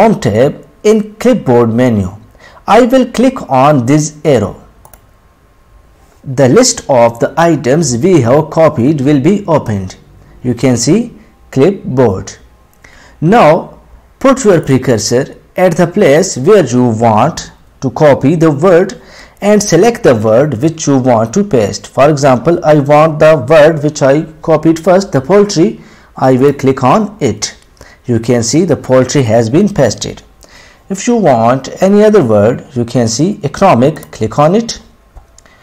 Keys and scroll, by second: 11.5 ctrl+F3, 21.9 ctrl+F3, 32.3 ctrl+F3.